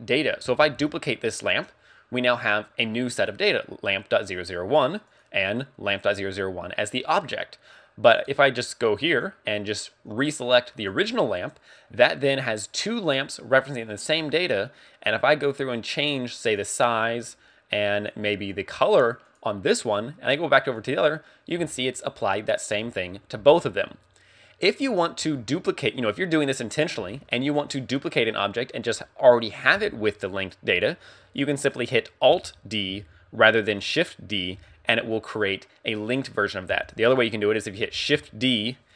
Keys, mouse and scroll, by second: 24.5 scroll up 2, 25.2 a, 25.8 right click, 26.7 right click, 27.0 x, 30.1 right click, 32.3 alt+d, 33.8 click, 34.6 x, 36.7 x, 37.6 right click, 38.0 shift+d.